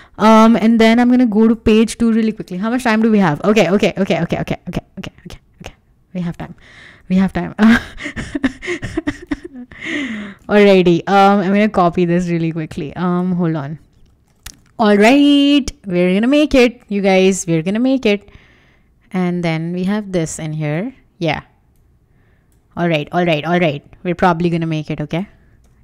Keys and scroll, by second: 8.0 super+c, 9.3 super+v, 10.1 super+s, 14.2 super+c, 14.4 super+Tab.